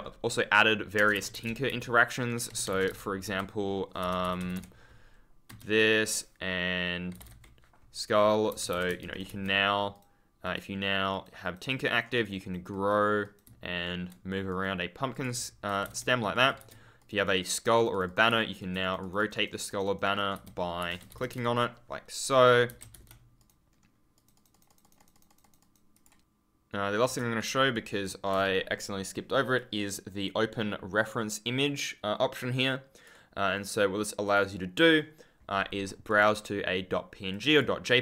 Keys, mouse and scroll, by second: 1.0 space, 1.6 e, 2.4 Escape, 3.2 e, 8.5 Escape, 8.8 1, 9.0 right click, 9.2 w, 9.7 scroll down 1, 9.8 right click, 10.3 click, 10.8 scroll down 1, 11.0 right click, 13.4 a, 14.4 right click, 15.0 click, 15.2-17.0 typing, 16.2 right click, 16.9 right click, 18.2 right click, 18.7 right click, 20.3 e, 22.7 Escape, 22.8 4, 23.3 right click, 23.6-24.1 scroll down 1, 24.1 right click, 25.8 click, 27.6 ctrl+click, 27.7-28.1 scroll down 1, 28.9 ctrl+click, 29.4 click, 32.8 click.